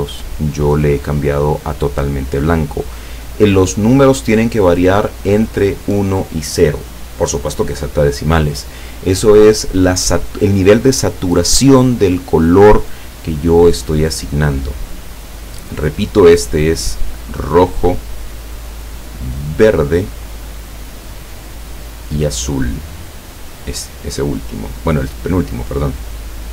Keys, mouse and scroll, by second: 16.9-18.2 drag, 18.8-20.6 drag, 21.3 click, 21.8-23.8 drag, 26.1 click.